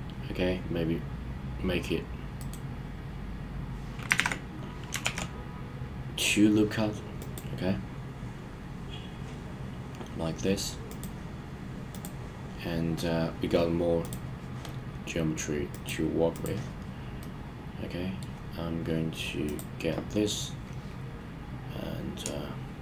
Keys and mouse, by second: 2.4 right click, 4.1 super+z, 5.0 ctrl+r, 10.8 click, 11.9 click, 15.7 click, 16.3 click, 17.2-18.2 middle drag.